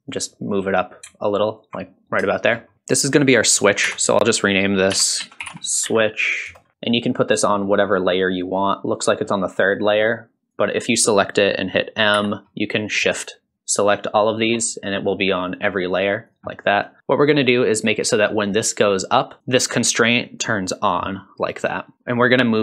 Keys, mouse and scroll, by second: 0.1-1.6 drag, 2.0-2.3 scroll up 1, 2.3 shift+middle click, 2.7 shift+scroll down 1, 3.9 F2, 7.3-8.2 drag, 8.5 click, 9.6 click, 10.1 click, 12.1 m, 14.7 click, 15.5 click, 15.8 click, 16.3 click, 16.8 click, 17.4 click, 19.4 click, 19.4 scroll down 4, 20.0 click.